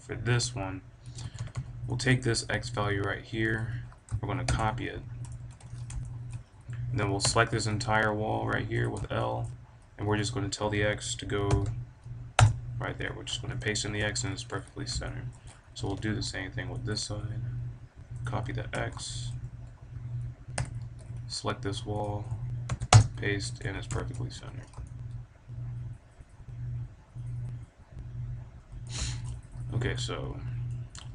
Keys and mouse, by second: 1.2 a, 1.3 b, 2.0-4.1 drag, 5.4 a, 5.6 middle click, 6.0 click, 6.1 middle click, 6.2-7.8 drag, 7.2 l, 7.8 g, 8.8 click, 9.1 middle click, 10.5-12.1 middle drag, 13.5 click, 13.6 middle click, 13.7-14.5 drag, 14.5 a, 15.0 middle click, 15.8 b, 19.2 a, 20.5 l, 23.6 a, 23.9-26.4 middle drag, 24.3 KP_5, 29.0 click, 29.1-31.1 middle drag, 29.6 click.